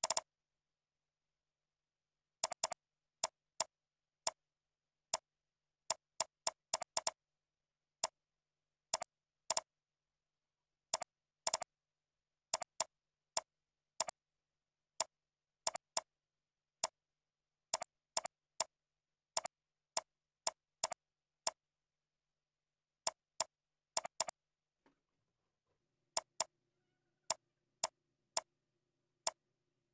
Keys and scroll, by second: 6.7 ctrl+c, 7.6 ctrl+a, 8.4 ctrl+v, 17.0 ctrl+a, 18.5 ctrl+c, 18.9 ctrl+v, 22.3 ctrl+Up, 23.8 ctrl+b, 25.9 ctrl+b.